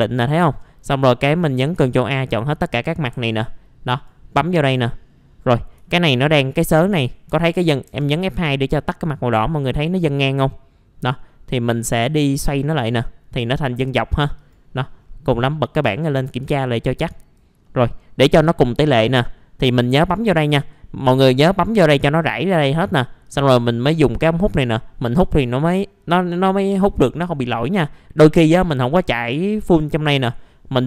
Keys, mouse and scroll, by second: 1.7 ctrl+a, 3.1 F2, 3.9 click, 5.8 alt+middle click, 6.3-6.9 scroll up 1, 6.9 F4, 7.3 F3, 7.7 scroll down 1, 7.9 F3, 8.3 F2, 8.7-9.6 scroll down 1, 12.3 click, 16.4 ctrl+a, 17.0 click, 17.6 middle click, 20.1 click, 20.7-21.9 scroll down 1, 23.2-25.2 drag, 28.3 click.